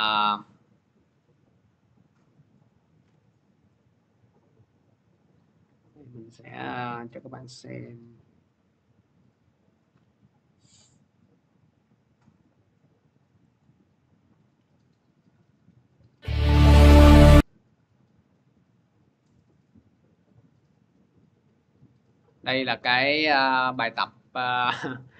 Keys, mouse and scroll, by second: 2.3 click, 4.7 click, 6.6 click, 7.6 click, 8.8 scroll down 2, 9.5 click, 9.7 middle click, 11.4 scroll, 12.2 click, 13.4 click, 15.0 scroll, 15.8-16.7 scroll, 16.7 click, 18.5 scroll, 19.0-19.4 scroll up 4, 19.8-20.2 scroll, 22.0 click.